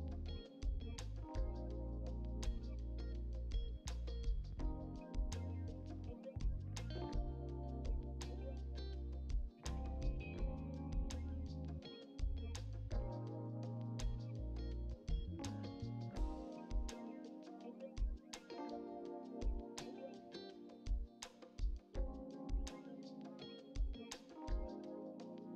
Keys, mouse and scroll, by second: 2.5 ctrl+r, 11.6 click, 12.4 alt+click, 14.4 click, 15.9 g, 20.9 click, 21.8 alt+click, 23.5 g.